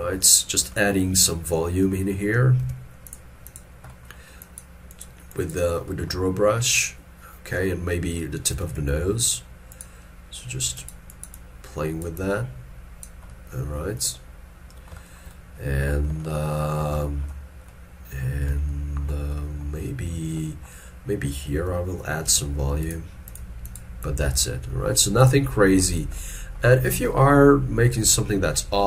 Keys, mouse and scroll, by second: 0.0 shift+middle click, 8.6 f, 15.1 shift+middle click, 15.4 shift+middle click, 16.3 ctrl+middle click, 17.1 shift+middle click, 19.4 middle click, 28.2 shift+middle click, 28.5 shift+middle click.